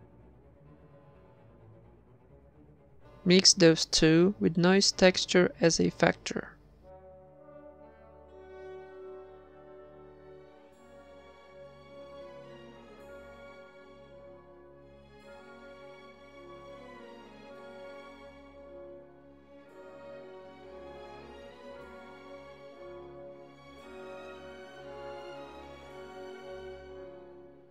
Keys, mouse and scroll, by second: 0.6-1.5 right drag, 0.8 shift+d, 1.7-2.6 drag, 4.4 shift+a, 6.9-8.0 drag, 9.4 middle click, 11.5-12.6 middle drag, 14.7 middle click, 17.3 shift+a, 21.8-22.5 middle drag, 22.8 a, 22.9 b, 22.9 g, 23.5-24.2 drag, 24.2 ctrl+s, 26.0-26.5 drag, 26.6-27.7 drag.